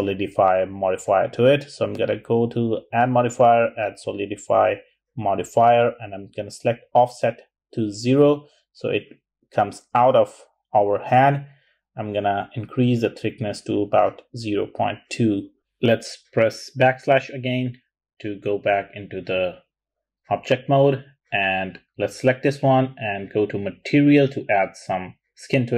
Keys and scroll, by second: 8.4-9.2 typing, 9.3 Return, 11.9 0, 12.2 ., 12.7 2, 14.3 Return, 17.0-17.8 typing, 21.4 typing.